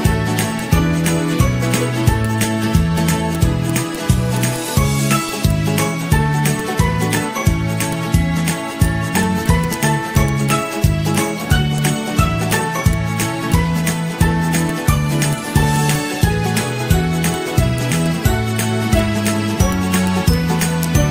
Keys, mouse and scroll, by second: 11.0 Delete, 11.2 Delete, 12.1 Delete, 12.6 Delete, 13.0 z, 13.7 z, 13.9 ctrl+-, 14.1 ctrl+-, 14.8 ctrl+-, 17.6 Delete, 18.3 ctrl+g.